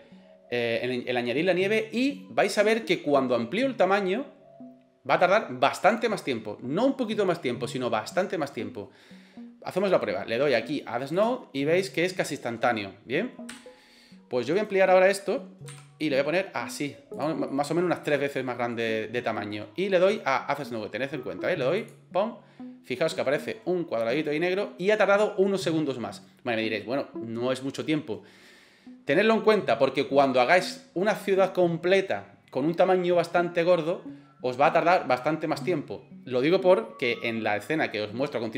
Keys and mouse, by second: 13.5 Delete, 14.6 right click, 15.7 s, 17.5 middle click, 18.3-18.7 middle drag, 24.0 click.